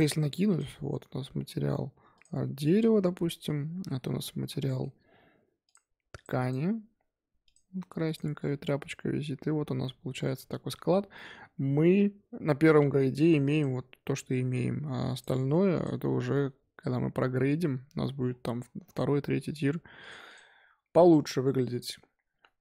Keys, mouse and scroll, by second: 0.5 Left, 2.5-2.9 scroll up 2, 2.9 Tab, 3.3 click, 4.4 l, 4.6-5.6 middle drag, 5.6-7.9 drag, 7.9 Tab, 8.0 click, 8.2-9.6 scroll down 1, 9.6 scroll down 6, 9.8 middle click, 10.3-11.1 scroll up 6, 11.1-12.8 shift+middle drag, 12.8-13.4 scroll down 3, 13.4 click, 13.7-14.3 scroll up 2, 14.3 scroll up 1, 14.5-15.1 scroll down 4, 15.1 click, 15.7 click, 20.2 click, 20.7-21.4 scroll up 2, 21.4-22.6 scroll down 5.